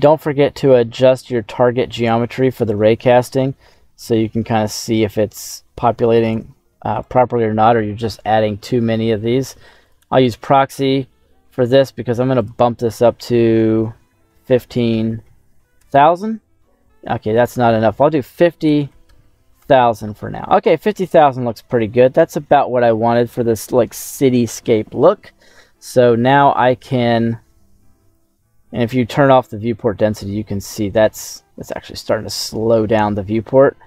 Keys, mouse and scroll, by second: 0.2 middle click, 0.6-1.0 scroll up 3, 1.1 scroll down 1, 1.1 middle click, 2.5 g, 3.0 z, 6.1 click, 6.4 middle click, 6.8 right click, 9.8 click, 12.3-15.8 drag, 15.0 KP_0, 15.2 KP_0, 17.2-19.7 drag, 18.6 KP_0, 19.0 KP_0, 20.7 middle click, 20.7 scroll down 1, 21.3 scroll up 2, 21.8-24.6 middle drag, 29.4 click, 30.1-33.1 middle drag.